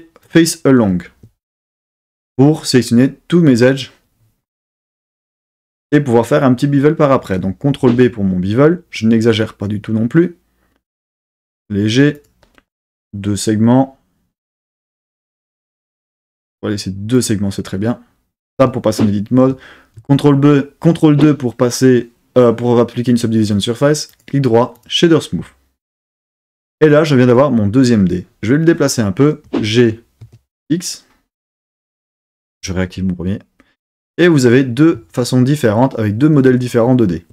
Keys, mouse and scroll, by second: 7.8 super+b, 12.2 click, 15.5 click, 17.1 click, 18.5 Tab, 20.1 super+2, 24.0-24.9 right drag, 29.4 g, 30.2 x, 31.7 click, 32.5 click.